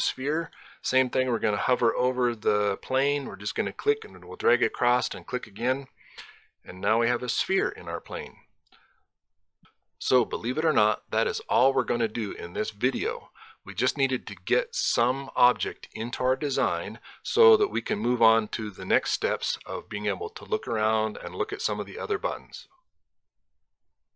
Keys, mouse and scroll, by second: 2.9 click, 4.8 click.